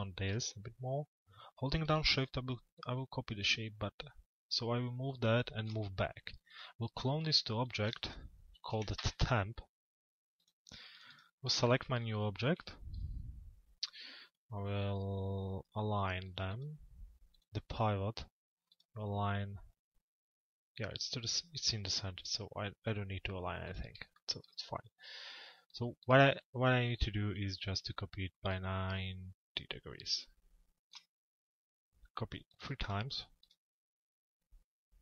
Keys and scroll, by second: 8.6 Return.